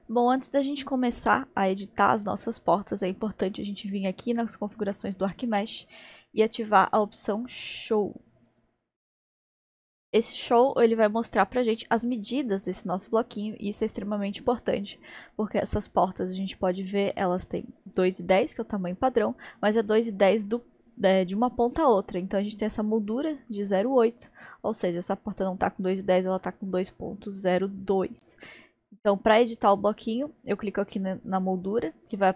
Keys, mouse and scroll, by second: 1.8-5.0 middle drag, 8.5-9.7 drag, 9.7-12.6 middle drag, 12.6-13.4 scroll up 2, 13.4-14.3 scroll up 2, 14.3-15.0 scroll up 1, 15.0-16.3 scroll up 1, 16.3 scroll up 1, 19.2-19.9 scroll up 1, 19.9-20.4 scroll up 1, 20.4-21.4 scroll down 1, 21.4-22.1 scroll down 1, 29.9 click.